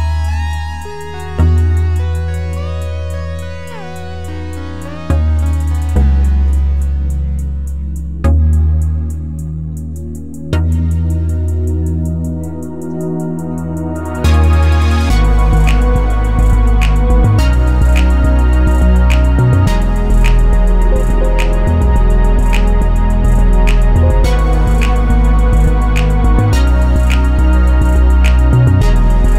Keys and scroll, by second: 0.0-0.3 typing, 19.4-20.3 typing, 23.3 6.